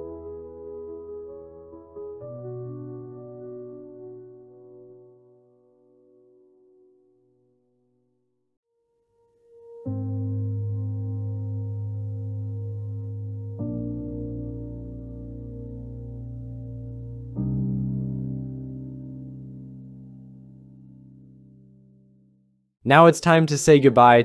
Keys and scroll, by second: 2.6 Tab, 5.9 Return, 7.3 j, 17.3-18.3 typing, 21.3 Return.